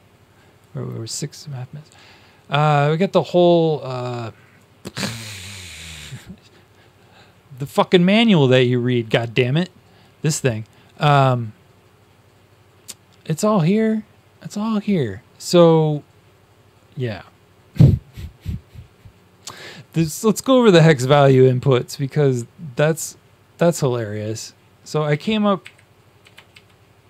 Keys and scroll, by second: 25.0 Down, 26.5 Up, 26.5 ctrl+shift+Down.